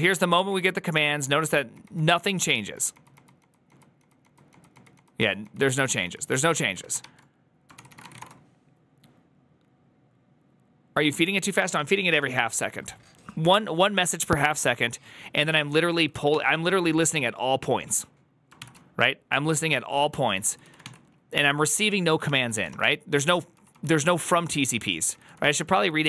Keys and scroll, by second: 0.5 ctrl+d, 1.3 ctrl+d, 1.4 ctrl+d, 2.0 ctrl+d, 3.7 ctrl+d, 4.3 ctrl+d, 4.5 ctrl+d, 4.7 ctrl+d, 4.9 ctrl+d, 5.2 ctrl+d, 6.7 ctrl+d, 6.7 ctrl+a, 6.9-8.5 typing, 7.6 ctrl+c, 18.2-26.0 typing, 22.1 ctrl+c.